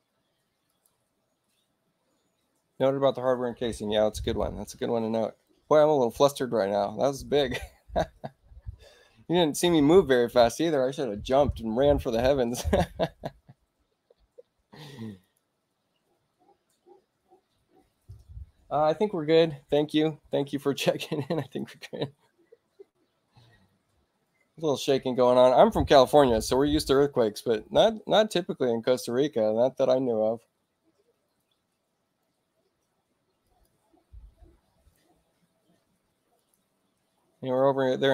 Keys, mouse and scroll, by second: 0.6 click, 12.6 click, 15.1 click, 21.3 click, 33.4 click, 36.3 click.